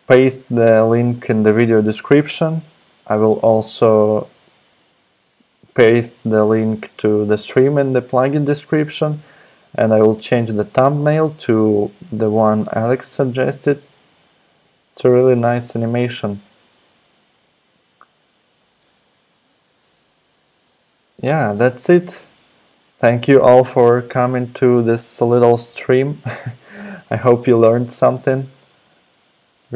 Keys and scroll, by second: 19.1 alt+super+Right, 27.9 super+Tab.